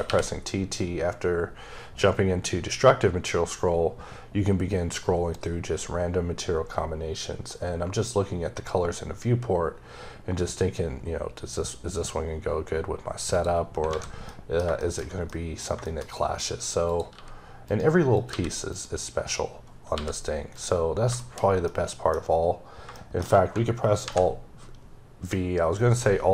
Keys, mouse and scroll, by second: 0.2-0.6 scroll up 2, 0.9-1.7 scroll up 2, 1.7-2.1 scroll up 2, 2.9-3.9 scroll up 1, 3.9-4.7 scroll up 1, 4.7-6.6 scroll up 2, 6.6-7.3 scroll up 2, 7.3-7.9 scroll up 1, 7.9-8.6 scroll up 1, 8.6-9.8 scroll up 1, 9.8-10.4 scroll up 1, 10.4-13.2 scroll up 2, 13.2 click, 13.8 a, 14.1 middle click, 16.3-16.7 scroll up 2, 16.7 click, 17.0 g, 17.5 right click, 18.0 click, 18.1 g, 18.5 right click, 19.8 g, 20.4 right click, 20.8 scroll down 2, 21.0 shift+middle click, 22.3-22.8 scroll down 2, 22.8 shift+middle click, 23.9 alt+v.